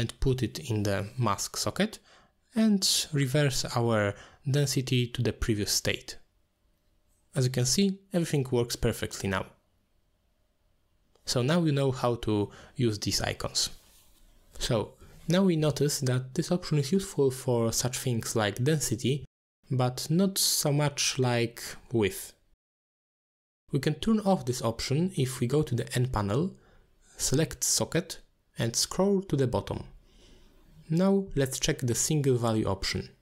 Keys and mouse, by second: 0.0 click, 0.3 click, 4.3 click, 6.1-7.2 drag, 7.8-8.1 middle drag, 9.0-10.9 drag, 11.5-11.9 middle drag, 12.3-13.2 middle drag, 14.6 click, 16.7 click, 28.8 click, 30.3 click, 31.7 click, 33.1 click.